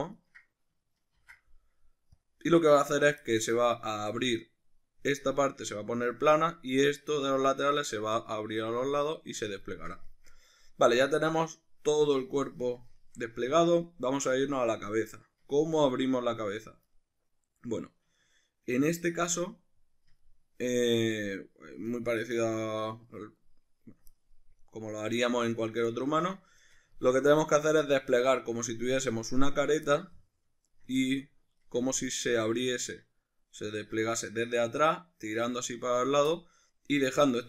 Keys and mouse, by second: 0.2 ctrl+right click, 1.2 ctrl+e, 3.3 middle click, 8.9 middle click, 9.6 ctrl+middle click, 10.1 shift+middle click, 10.3-24.6 middle drag, 24.6 right click, 25.1-30.7 middle drag, 25.6 right click, 30.7 ctrl+right click, 31.0-33.8 middle drag, 33.8 ctrl+right click, 36.3-37.4 middle drag.